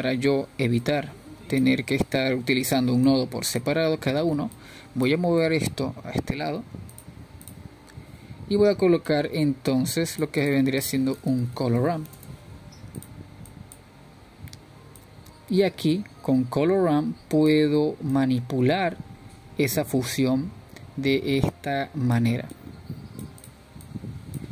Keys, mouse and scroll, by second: 2.3-4.1 scroll down 3, 4.1-4.9 drag, 6.4 click, 7.9 click, 10.7-15.5 drag, 15.5 shift+a, 18.9-24.5 drag.